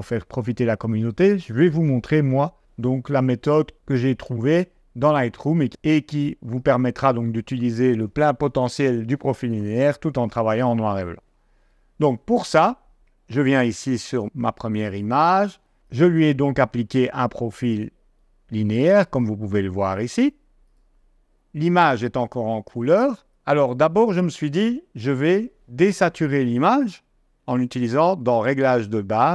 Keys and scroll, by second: 11.6 g, 14.5 d.